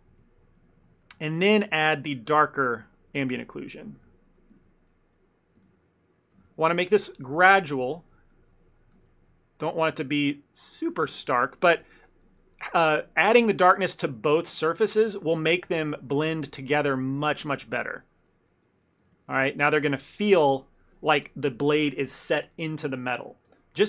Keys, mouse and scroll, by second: 0.0 middle click, 0.3 ctrl+middle click, 0.6 middle click, 1.1 ctrl+middle click, 1.4 f, 1.7 ctrl+middle click, 2.0 middle click, 2.3 f, 2.5 shift+middle click, 2.8 f, 3.3 click, 3.5 click, 4.0 click, 4.1 shift+f, 4.7 ctrl+middle click, 5.0 click, 5.2 click, 5.9 ctrl+z, 6.0 ctrl+z, 6.6 shift+f, 7.3 f, 7.7 click, 8.0 click, 8.2 click, 8.9 click, 9.4 click, 9.4 middle click, 9.7 middle click, 10.0 ctrl+middle click, 10.1 ctrl+middle click, 10.7 click, 11.0 click, 11.2 click, 11.5 shift+middle click, 11.5 shift+middle click, 11.7 middle click, 12.1 click, 12.3 click, 12.7 click, 13.0 click, 13.6 shift+middle click, 13.9 middle click, 14.4 click, 14.7 click, 15.0 middle click, 15.5 ctrl+middle click, 15.8 click, 16.0 click, 16.6 click, 17.1 middle click, 17.4 shift+middle click, 17.6 middle click, 18.4 click, 19.1 click, 19.2 ctrl+middle click, 19.4 ctrl+middle click, 19.5 shift+middle click, 19.6 middle click, 19.9 middle click, 20.1 ctrl+middle click, 20.3 middle click, 21.9 ctrl+middle click.